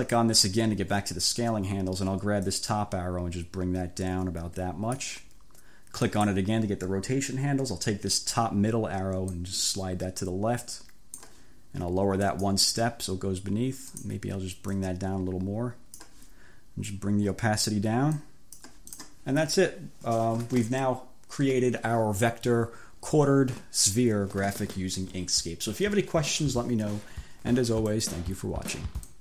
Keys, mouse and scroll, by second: 0.1 click, 2.5-5.2 drag, 6.1 click, 9.4-11.5 drag, 12.4 click, 14.0 click, 14.8-16.2 drag, 17.0 click, 18.2 click, 19.0 click, 28.0 click, 29.0 click.